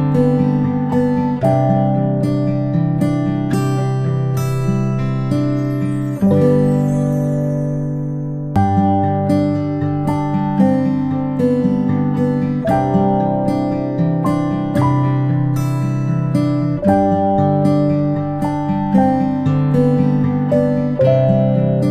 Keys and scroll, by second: 4.8 i, 9.8 i, 14.8 ctrl+[, 15.0 ctrl+[, 17.2 i, 19.4 v.